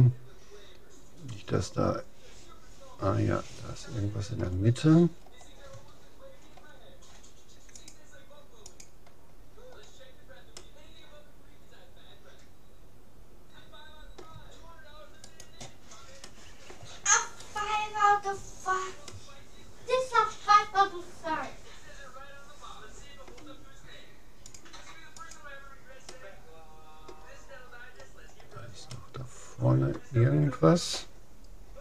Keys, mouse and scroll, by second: 4.9-7.1 middle drag, 7.7-9.5 drag, 9.7-13.5 middle drag, 15.3-16.9 right drag, 16.3-18.1 middle drag, 17.4-19.1 right drag, 18.4-20.7 middle drag, 24.5-26.1 drag, 26.1-27.7 middle drag, 28.3-28.9 scroll up 1, 28.9-30.7 middle drag.